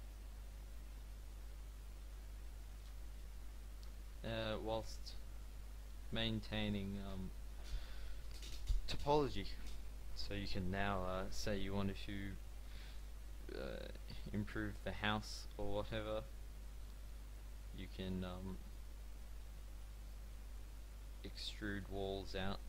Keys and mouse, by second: 2.1 a, 2.5 click, 2.7 Tab, 3.9 z, 5.4 Tab, 12.9 click, 13.7-15.6 middle drag, 18.5 middle click, 22.3 e.